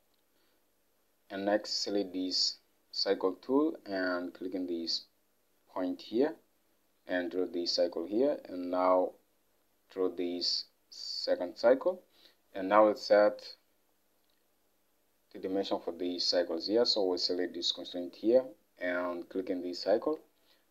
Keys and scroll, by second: 20.1 alt+Tab.